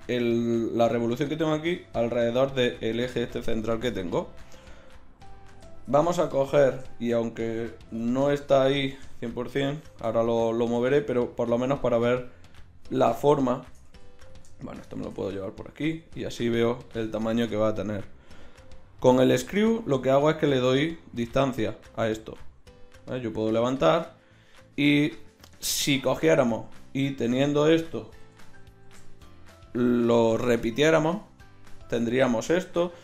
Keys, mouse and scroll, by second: 4.8 KP_1, 6.0 Tab, 7.9 g, 10.7 g, 11.7-12.3 middle drag, 13.9 g, 15.1 g, 16.7 g, 19.0-26.7 drag, 28.2 KP_1, 28.7 middle click.